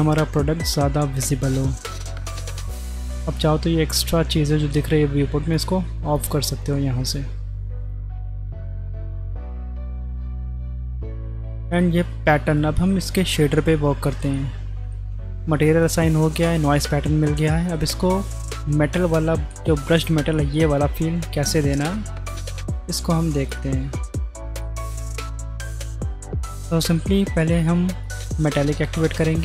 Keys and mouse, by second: 2.3 click, 5.5 click, 6.1 click, 9.4-10.1 middle drag, 11.6 shift+click, 12.5 click, 14.3-15.0 middle drag, 16.4 middle click, 17.5 middle click, 20.5 middle click, 21.8 click, 24.7-26.1 middle drag, 26.7 middle click, 28.0 middle click, 28.7 click.